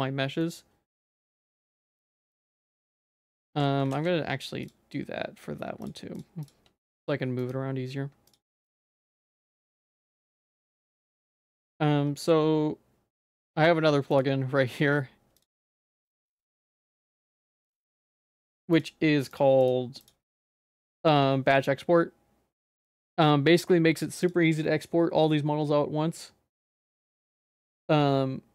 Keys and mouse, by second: 0.4 middle click, 1.7 shift+click, 2.0 g, 3.5 ctrl+s, 6.8 g, 8.3 shift+click, 10.1 g, 11.4 ctrl+s, 13.2-23.5 drag, 24.2-28.5 drag.